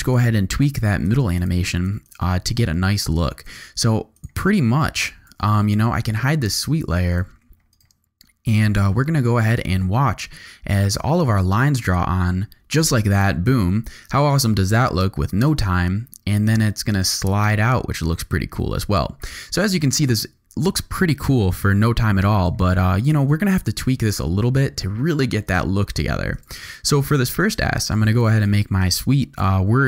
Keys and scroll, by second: 5.0 shift+/, 5.3 shift+v, 6.2 v, 9.5 space, 19.6 space, 23.6 j, 24.5 k.